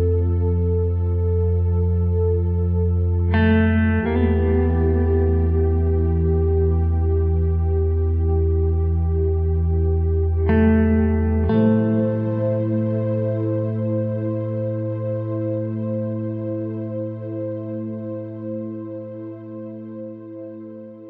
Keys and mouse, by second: 0.0 Tab, 0.9 Tab, 1.2 shift+middle click, 2.1 right click, 2.3 g, 3.4 right click, 3.5 g, 5.6 shift+middle click, 5.9 KP_3, 6.7 alt+z, 7.4 right click, 7.6 c, 8.3 g, 10.2 alt+z, 10.6 shift+middle click, 11.2 alt+z, 11.5 right click, 12.2 b, 12.7 s, 13.4 g, 14.1 e, 15.9 s, 16.8 alt+z, 17.3 shift+middle click, 17.9 ctrl+r, 19.5 s.